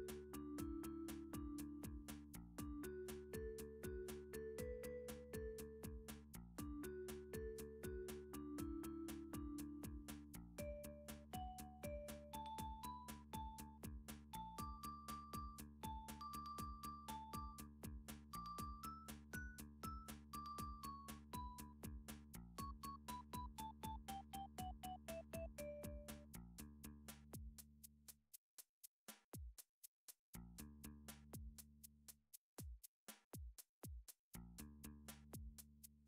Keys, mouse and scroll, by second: 0.3 shift+scroll, 0.3 s, 2.0 click, 2.5 g, 3.3 click, 3.9 d, 4.6 click, 5.3 s, 6.7 click, 7.2 g, 8.0 click, 8.3 s, 9.4 click, 9.6 scroll, 10.1 shift+middle click, 11.6 d, 13.6 click, 14.1 s, 16.7 click, 17.2 g, 18.5 click, 19.0 d, 20.2 click, 20.7 s, 22.5 click, 23.3 d, 25.2 click, 25.7 s, 27.0 click, 27.8 g, 28.6 click, 30.6 d, 33.7 click, 34.8 s.